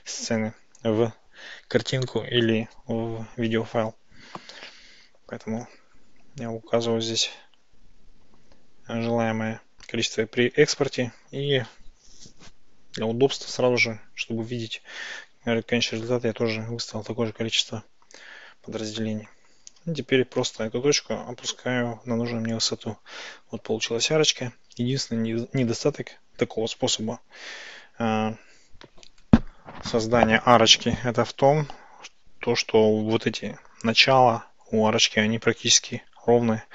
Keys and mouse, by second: 20.4 g, 20.7 y, 22.6 click, 23.6 Tab.